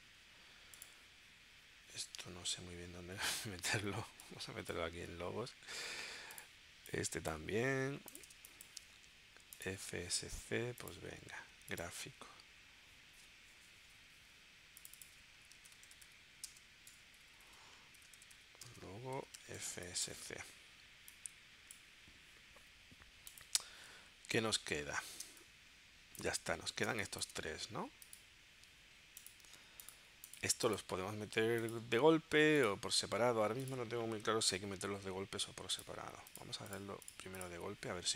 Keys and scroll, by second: 8.4 space, 15.8-19.2 typing, 20.1 Return, 25.3 space, 26.9 space.